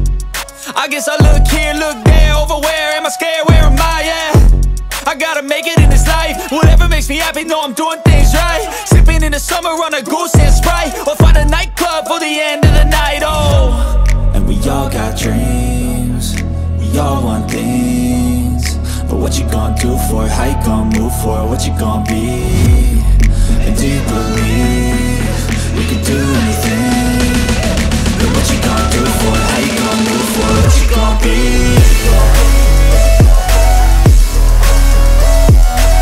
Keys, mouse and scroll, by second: 0.0 click, 1.4 click, 2.9 click, 3.8 click, 5.6 click, 6.8 click, 7.7-8.0 shift+drag, 10.4 click, 11.0 shift+click, 12.1 ctrl+j, 12.6-13.0 scroll down 2, 13.5-14.2 middle drag, 13.5-14.2 scroll down 2, 14.9 r, 15.6 x, 18.0 click, 18.7 r, 19.1 x, 22.2 click, 22.5 middle click, 24.2 g, 24.6 x, 26.6 click, 26.9 middle click, 28.3 g, 28.6 z, 29.8 click, 30.6 g, 31.0 x, 32.5 drag, 33.0-33.5 middle drag, 33.8-34.3 shift+middle drag.